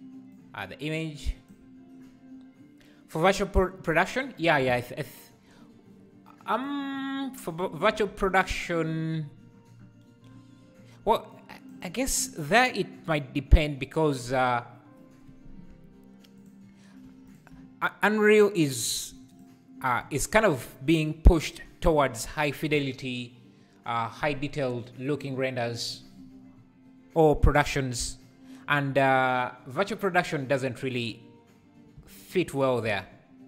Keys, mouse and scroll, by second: 3.6-6.2 scroll up 3, 11.3-14.2 drag, 15.7 Tab, 16.4 click, 17.0 3, 17.3 click, 19.4 shift+click, 30.5 u, 31.9 a, 32.8 Tab.